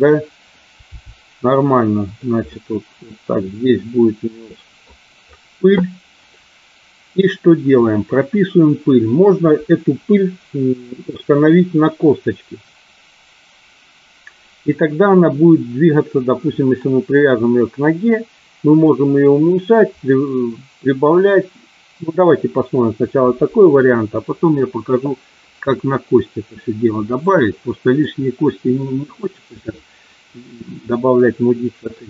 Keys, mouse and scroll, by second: 0.8 g, 2.0 click, 2.5 scroll up 1, 2.6-4.8 middle drag, 27.2 middle click, 28.7 scroll up 1, 28.8 middle click, 32.0 scroll up 1.